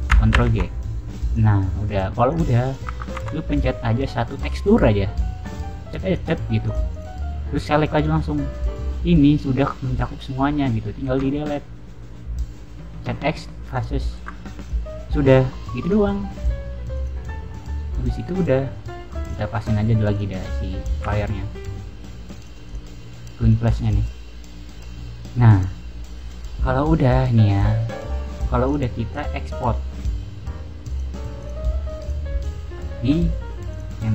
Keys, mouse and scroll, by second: 0.3 ctrl+j, 1.2 click, 1.6 scroll down 2, 1.8 scroll up 2, 2.2 click, 2.6 click, 2.8 Tab, 3.1 3, 3.4 click, 6.0 click, 6.6 click, 6.8 click, 7.8 click, 8.4 scroll down 1, 8.9 middle click, 10.3 middle click, 11.0 x, 13.7 click, 14.1 Tab, 14.6 click, 15.7 click, 16.9 click, 17.5-18.9 middle drag, 19.2 click, 20.0 click, 20.4 middle click, 21.0 g, 22.3 click, 22.6 click, 23.3 click, 23.8 click, 24.7 scroll down 2, 25.2-25.7 scroll up 2, 28.6 click, 29.0 click, 29.9 click, 30.8 click, 31.3 click, 31.9 click, 32.3 click, 33.6 click.